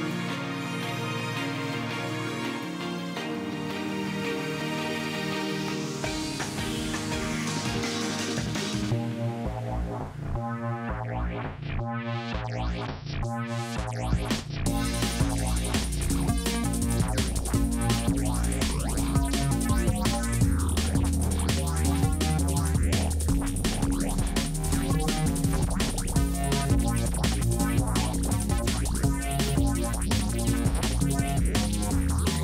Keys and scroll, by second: 8.1 F6, 16.8 ctrl+alt+s, 21.9-23.0 typing, 26.7-27.4 typing, 27.6 ctrl+z, 29.9 ctrl+alt+s.